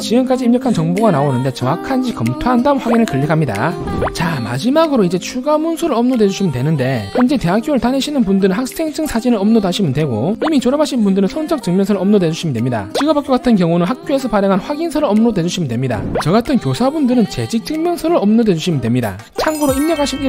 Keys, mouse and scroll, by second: 2.5 click.